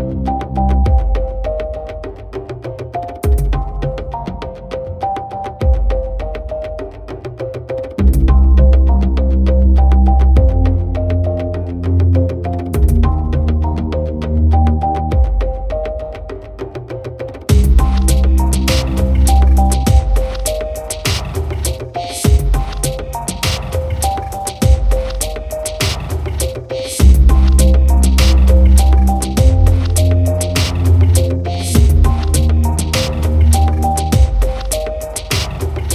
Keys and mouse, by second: 2.1 right click, 2.4 right click, 3.2 right click, 4.0 right click, 4.5 b, 5.9 right click, 8.0 right click, 8.5 right click, 8.8 right click, 9.1 right click, 10.4 right click, 11.1 right click, 12.2 right click, 12.6 right click, 13.6 right click, 15.1 right click, 15.4 right click, 16.3 right click, 18.2 right click, 18.4 right click, 19.2 right click, 19.6 b, 21.0 right click, 22.2 right click, 26.2 right click, 26.6 right click, 26.8 b, 27.4 right click, 28.1 right click, 28.4 right click, 29.5 right click, 30.1 right click, 31.4 right click, 32.0 right click, 32.5 right click, 32.6 b, 33.2 right click, 33.5 right click, 34.7 right click, 35.5 right click.